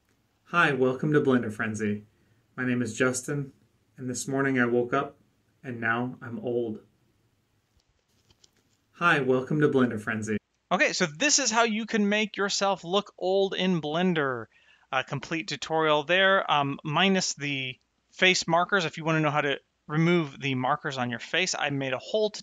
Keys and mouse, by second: 10.3 space.